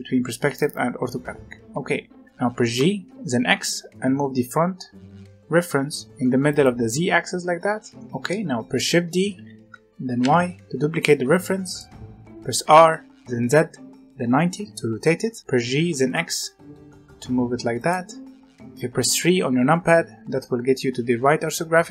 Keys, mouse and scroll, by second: 0.5-2.7 middle drag, 2.7 g, 2.9-4.3 right drag, 8.0-9.3 middle drag, 9.3 shift+d, 12.5 r, 15.5 g, 19.1 KP_3, 21.5-21.9 scroll up 1.